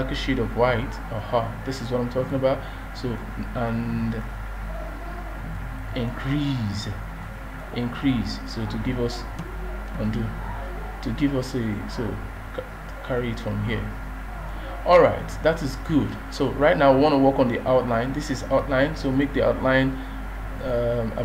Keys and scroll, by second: 10.0 ctrl+z.